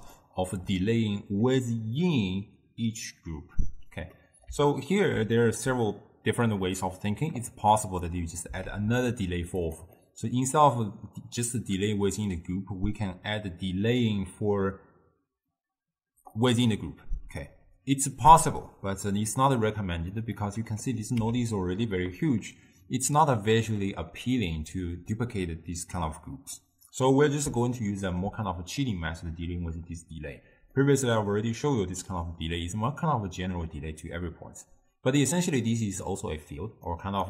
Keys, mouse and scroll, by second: 4.2-7.5 middle drag, 7.5 click, 8.7 shift+d, 10.0-13.0 middle drag, 16.2 d, 16.4-17.5 drag, 17.5 d, 17.5 d, 20.2 click, 21.3 x, 26.0 d, 26.1 right click, 27.0 d, 27.8-33.9 ctrl+middle drag, 35.6 click.